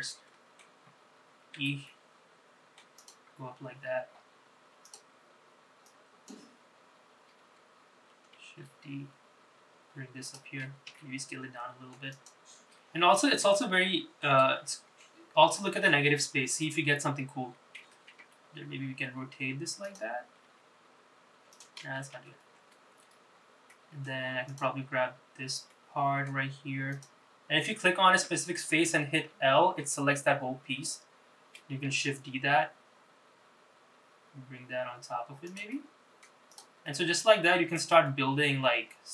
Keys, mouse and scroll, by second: 0.0 middle click, 0.9-1.4 scroll down 3, 1.7 e, 3.6-4.2 scroll down 1, 4.2 scroll up 3, 5.0 click, 6.0 click, 8.5 shift+d, 11.0 s, 13.0-13.6 scroll down 3, 13.7 shift+middle click, 14.7-16.4 scroll up 4, 18.3 r, 20.6 g, 22.0 ctrl+z, 22.2 ctrl+z, 23.8 middle click, 24.6 click, 25.8 middle click, 27.0 click, 29.3 l, 32.0 shift+d, 35.8 middle click, 36.6 click, 37.0 middle click, 38.2-39.1 middle drag.